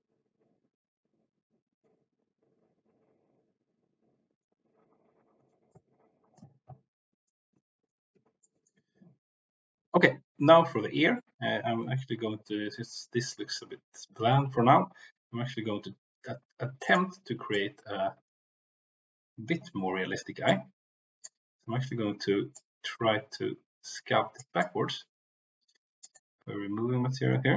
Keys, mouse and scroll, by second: 5.8-7.1 right drag, 8.4 shift+middle click, 16.8 click, 17.5 click, 20.4 click, 22.5-24.4 drag, 24.5-26.0 drag, 26.1-27.5 drag.